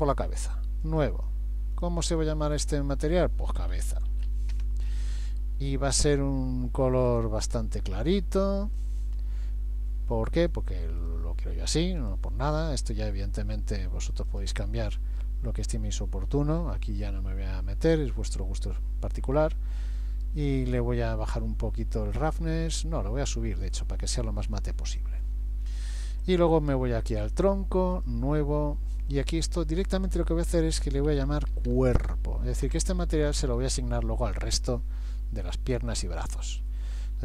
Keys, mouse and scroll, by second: 0.9 click, 1.8 click, 7.1 click, 11.0 click, 12.0 click, 14.3 click, 15.0-15.8 scroll down 3, 19.9 click, 22.4 click, 26.3 click, 28.0 click, 29.1 click.